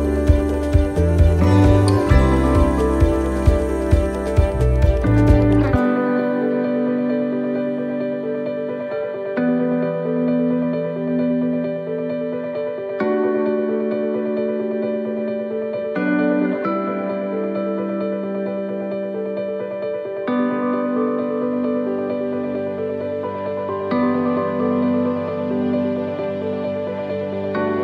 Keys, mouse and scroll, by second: 2.8 middle click, 3.9 scroll down 2, 4.3 middle click, 4.6 scroll down 2, 5.0 scroll up 4, 5.7 right click, 7.7 click, 8.4 click, 11.7 click, 15.9 click, 17.9 click, 19.2 right click, 20.0 click, 20.4 click, 21.7 right click, 22.8 l, 23.5 middle click, 25.0 right click, 25.4 l, 26.0 middle click, 26.9 scroll down 2.